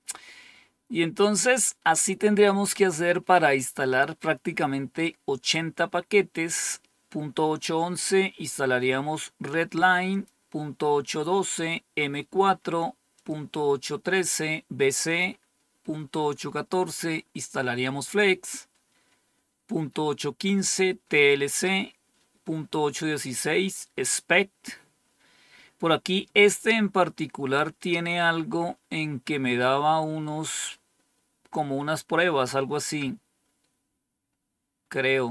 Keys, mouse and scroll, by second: 10.1 click, 13.1 click, 15.0 click, 17.9 click, 21.1 click, 27.0-27.6 scroll down 2, 27.6-30.2 scroll down 1, 30.2-30.8 scroll down 1, 30.8-31.9 scroll down 1, 31.9-33.0 scroll down 1, 33.0-33.9 scroll down 1, 33.9 scroll down 1, 34.5-35.3 scroll down 2.